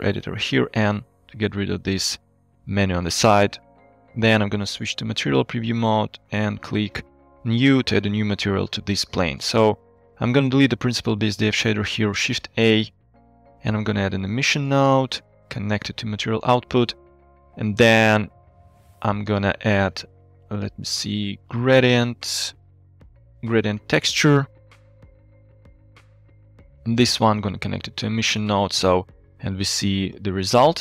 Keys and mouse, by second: 0.9 n, 4.6 z, 6.3 click, 7.3 middle click, 9.5 click, 10.5 click, 11.2 x, 11.9 shift+a, 15.7 alt+drag, 16.4 click, 17.1 click, 18.8 shift+a, 23.0 click, 23.6 click, 23.7 x, 24.0 shift+a, 27.5 alt+click, 28.4 click, 29.3 middle click, 30.2 middle click.